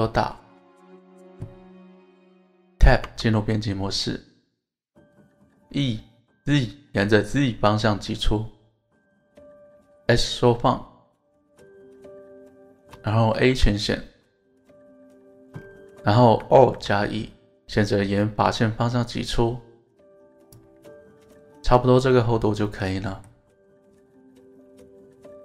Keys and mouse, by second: 0.7 click, 3.0 Tab, 5.3 e, 10.1 click, 12.7 shift+click, 14.9 middle click, 14.9 a, 16.6 alt+e, 20.4 click, 20.9 middle click, 22.0 alt+z, 22.7 middle click.